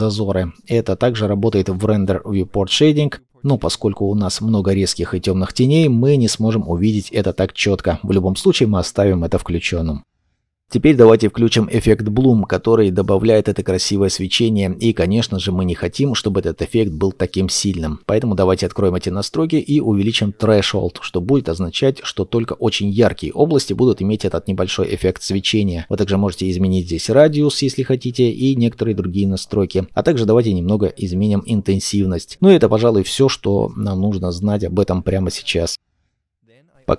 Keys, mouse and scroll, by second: 12.1-12.9 scroll down 1, 13.0 shift+middle click, 13.5-14.3 scroll up 1.